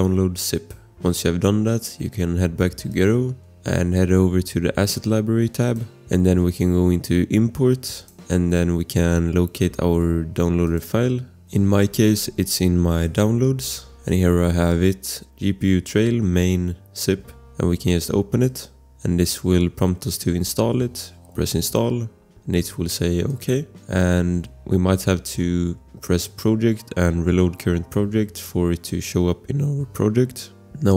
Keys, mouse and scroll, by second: 7.9 click, 11.2 BackSpace, 13.7 Return, 18.4 click, 26.2 click, 30.8 click.